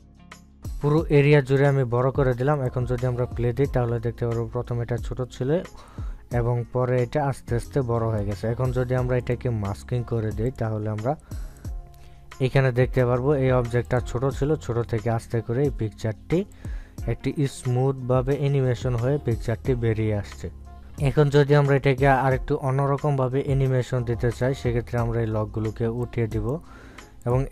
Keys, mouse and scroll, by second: 0.0 shift+click, 0.2 ctrl+scroll down 1, 0.4-11.1 shift+drag, 11.1 right click, 11.6-14.1 drag, 15.7 click, 18.4 click, 20.8 ctrl+z, 20.8-27.5 drag.